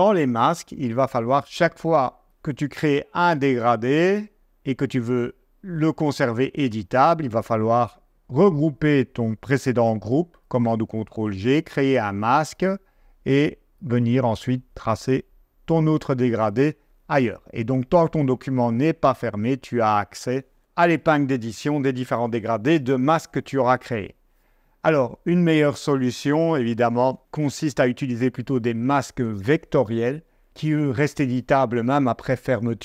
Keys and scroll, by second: 10.2 super+g.